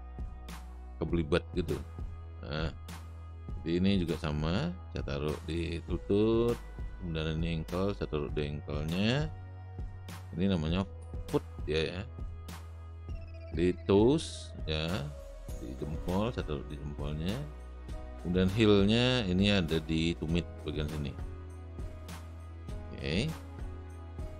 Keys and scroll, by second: 4.9 space.